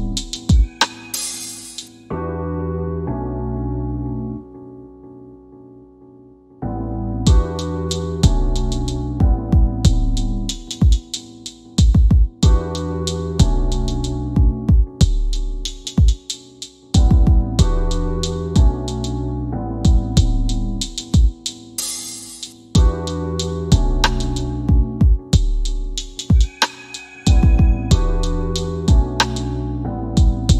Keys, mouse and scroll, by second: 0.6 scroll up 1, 1.7 middle click, 2.6-3.0 scroll down 1, 4.5 click, 10.1 click, 12.9 scroll up 1, 14.5 scroll down 1, 22.8 middle click, 26.9 scroll down 1, 28.9 click, 29.6 scroll down 1.